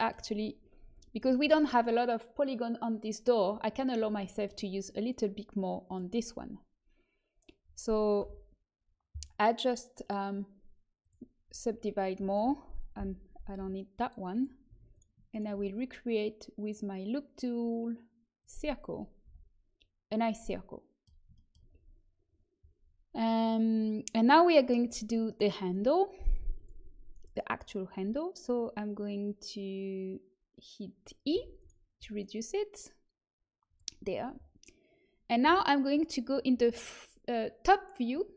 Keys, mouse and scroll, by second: 0.8 Tab, 4.2-6.6 middle drag, 5.8-8.1 drag, 8.1 l, 9.9-11.7 drag, 11.7-13.5 right drag, 12.2-13.2 drag, 13.5 Delete, 14.9-20.4 drag, 16.6-18.2 right drag, 19.2 a, 26.5-28.4 drag, 27.4-31.2 right drag, 31.2 e, 31.9 s, 35.4 KP_7.